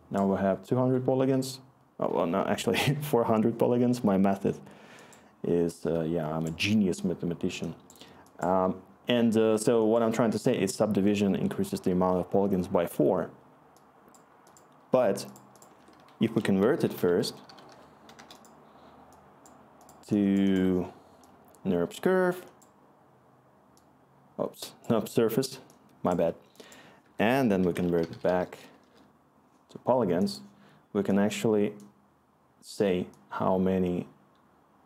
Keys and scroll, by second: 15.7 Tab, 16.4-18.2 typing, 27.0 Tab, 27.1-28.8 typing, 28.8 Return.